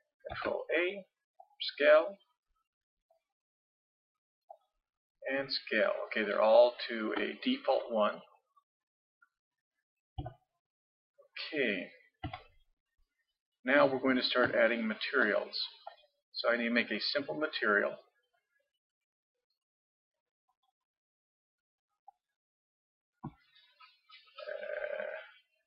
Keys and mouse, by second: 0.3 ctrl+a, 3.1-6.5 drag, 6.8-10.2 middle drag, 10.2 n, 12.2 z, 15.9-25.6 drag.